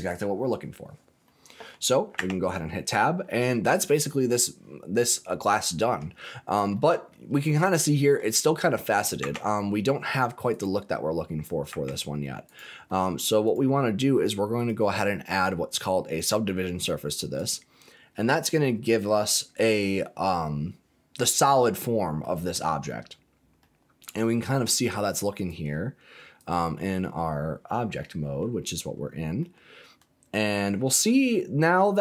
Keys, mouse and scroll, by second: 1.0 scroll down 1, 1.2 middle click, 2.1 Tab, 2.9-4.0 middle drag, 5.0-5.5 scroll up 3, 5.5 middle click, 6.2 shift+middle click, 6.7 middle click, 7.0-7.6 scroll down 3, 7.6 middle click, 9.1 Tab, 10.4 click, 11.7 Tab, 12.4 click, 12.8 middle click, 13.4 click, 14.5-18.9 drag, 22.2 middle click, 22.7-23.5 scroll up 3, 23.5 middle click, 25.4 click, 26.4 click, 27.9 middle click, 28.6 click, 29.0-29.4 scroll down 2, 29.4-30.8 middle drag, 31.2-31.6 scroll up 3, 31.6 middle click.